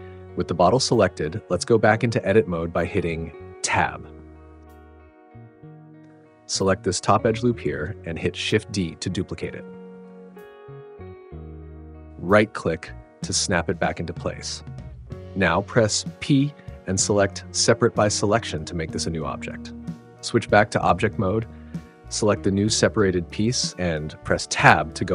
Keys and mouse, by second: 3.6 Tab, 4.8 KP_Decimal, 6.4 alt+click, 10.3 shift+d, 16.5 p, 20.7 Tab, 23.5 click.